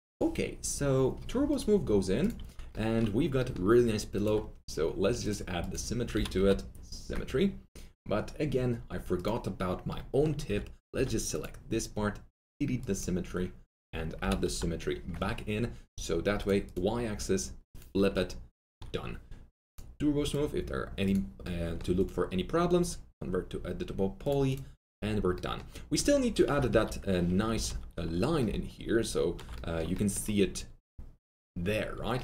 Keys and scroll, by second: 2.6 2, 6.1-7.0 typing, 10.4 alt+2, 14.2-15.0 typing, 18.1 Return, 26.6 F3, 27.6 alt+w.